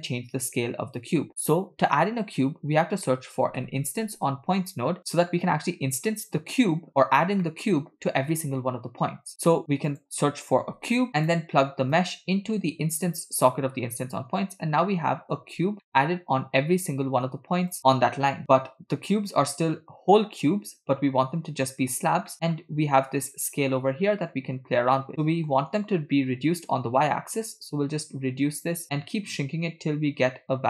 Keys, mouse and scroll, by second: 2.4 BackSpace, 2.8 BackSpace, 6.6 click, 7.0-7.4 scroll down 2, 7.4 middle click, 9.3 shift+a, 11.9 click, 12.1-13.5 drag, 14.4-14.8 scroll up 1, 14.8-15.1 middle drag, 15.3-15.7 scroll up 1, 15.9 shift+middle drag, 17.7 click, 22.3 middle click, 22.5-23.1 scroll up 1, 23.1 scroll up 2, 25.1-25.7 middle drag, 27.5-30.6 shift+drag.